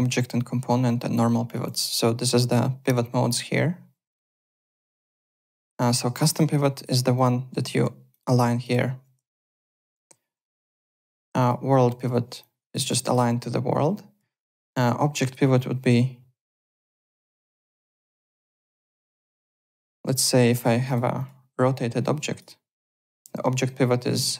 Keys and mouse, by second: 1.4 click, 2.4 click, 4.1 click, 4.3 alt+middle click, 4.7 click, 5.1 w, 5.5 alt+middle click, 6.4 f, 6.7 click, 7.1 click, 7.8 f, 8.1 click, 8.6 click, 9.6 click, 10.5 w, 10.9 click, 12.4 click, 12.8 ctrl+z, 13.0 alt+click, 14.4 alt+middle click, 15.2 click, 16.5 click, 17.4 click, 18.9 alt+click, 19.5 alt+middle click, 20.1 e, 20.5 w, 20.8 click, 21.5 e, 22.0 click, 22.5 w, 23.0 click.